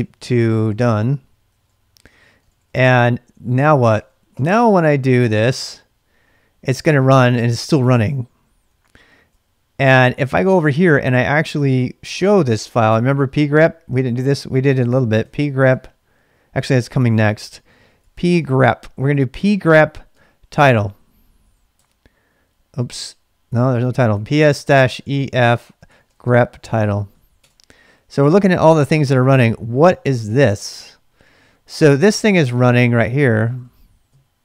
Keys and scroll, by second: 0.0-4.3 typing, 3.9 ctrl+[, 5.6 Return, 8.7 ctrl+a, 9.3 \, 14.0-16.2 typing, 18.0-18.3 typing, 20.1-21.8 typing, 23.8-27.9 typing, 33.5 Up, 33.5 Up, 34.1 Down.